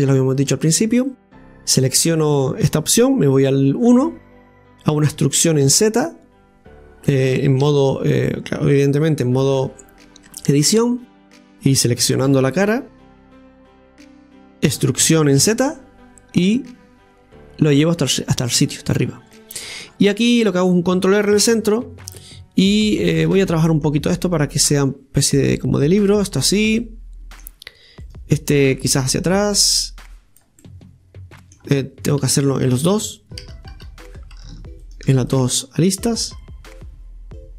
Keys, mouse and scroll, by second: 0.0 right click, 0.5 Tab, 0.9 Tab, 1.1-2.0 right drag, 2.0-3.4 middle drag, 3.4 KP_1, 5.1 e, 8.3 Tab, 10.6-11.3 scroll up 2, 11.3 scroll up 1, 11.3 middle click, 12.3 a, 13.0 KP_3, 13.8 KP_1, 15.0 e, 19.4 middle click, 20.1-21.2 scroll down 2, 21.2 ctrl+r, 22.2 middle click, 22.9 right click, 23.7 middle click, 24.6-26.8 drag, 26.8-28.0 middle drag, 28.0-29.0 right drag, 29.0-30.6 drag, 30.6-32.3 middle drag, 32.3 ctrl+x, 33.7 ctrl+z, 34.8 shift+right click, 35.4 middle click, 36.0-37.5 drag.